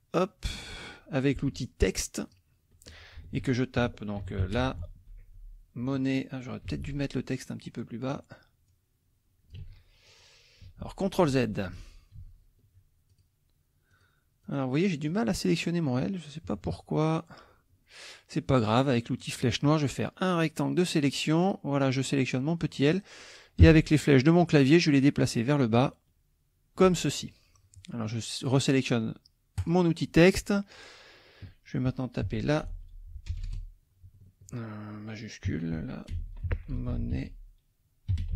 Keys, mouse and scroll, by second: 2.2 click, 3.3 ctrl+a, 3.9-5.6 typing, 6.6 F1, 7.6 click, 8.7-9.7 drag, 9.6 ctrl+z, 10.1 ctrl+click, 10.8 ctrl+z, 13.1 ctrl+click, 13.9 click, 14.4 click, 15.1 click, 16.4 -, 19.2 click, 20.0 click, 23.6 Down, 29.6 click, 32.2 a, 32.7 space, 33.3 BackSpace, 35.5 Caps_Lock, 35.8-38.3 typing.